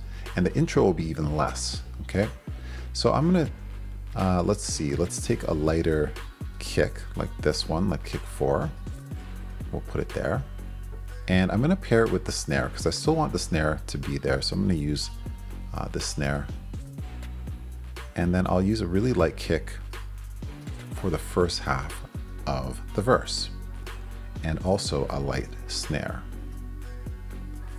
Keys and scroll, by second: 7.4 super+c, 9.4 super+v, 13.1 super+c, 15.0 super+c, 16.5 super+v, 20.5 super+c, 22.2 super+v, 25.3 super+c, 26.5 super+v.